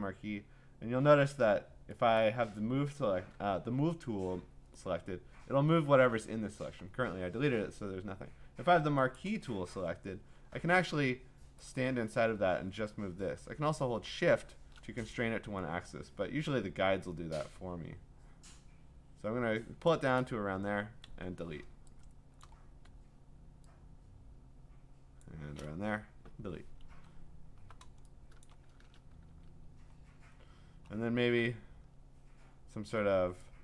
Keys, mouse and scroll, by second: 2.2 click, 9.2 click, 9.7-10.3 scroll, 19.9 click, 21.0-22.4 Delete, 22.4 click, 25.2 click, 26.2 Delete, 27.1-28.2 scroll, 28.4 click, 29.3 ctrl+d, 30.3-31.3 scroll.